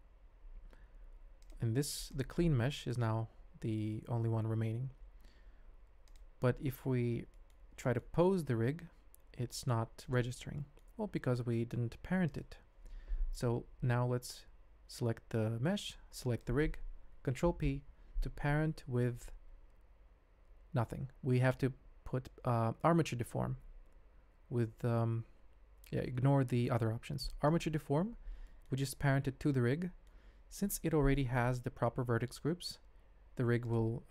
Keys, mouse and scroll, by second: 0.0 n, 1.4 click, 2.0 click, 4.9 n, 6.9 ctrl+Tab, 7.3 shift+click, 7.8 middle click, 8.5 g, 10.5 click, 11.0 ctrl+Tab, 12.3 click, 16.2 shift+click, 17.4 ctrl+p, 28.4 shift+middle drag, 29.8 middle click, 30.6 click.